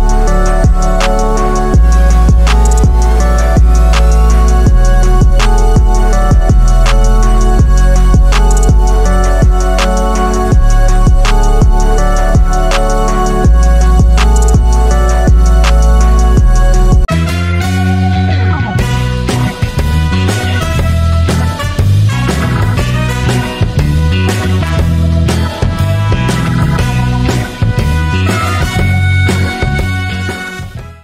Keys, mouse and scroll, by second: 0.6 super+-, 5.8 super+=, 7.0 super+-, 8.7-12.1 drag.